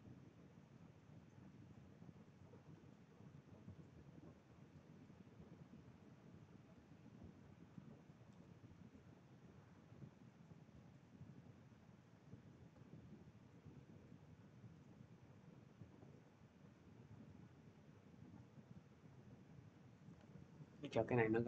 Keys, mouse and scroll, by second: 0.5 shift+click, 8.2 click, 9.6 click, 11.5 click, 12.0 click, 16.0 click, 17.3 middle click, 17.7 scroll, 21.2 shift+click, 21.2 scroll.